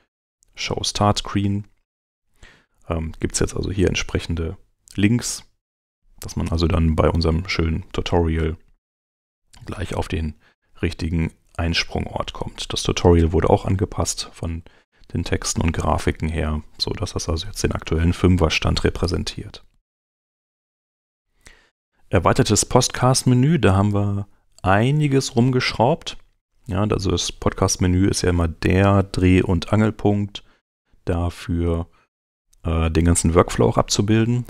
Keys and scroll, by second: 14.4 super+Tab, 23.6 super+Tab.